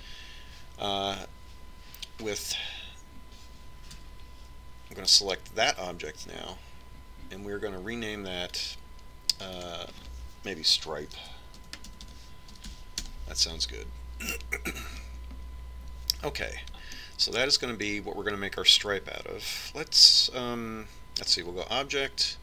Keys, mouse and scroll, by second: 5.2 Tab, 6.2-8.1 right drag, 9.7-14.3 drag, 18.2-20.0 middle drag.